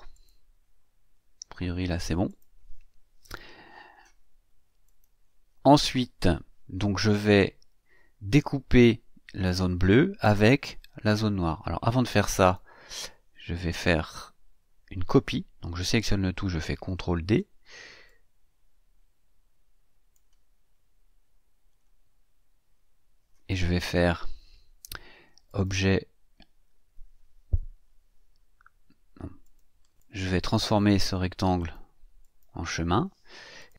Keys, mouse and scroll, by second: 0.1 click, 2.3 click, 4.8 click, 12.4 click, 13.0-14.0 drag, 17.1 ctrl+d, 18.0-20.3 drag, 20.6-21.0 scroll down 2, 21.7-22.0 scroll up 2, 25.5 click, 29.4 click, 29.9 click, 30.4 click, 31.6 click, 32.2 click, 33.6 click.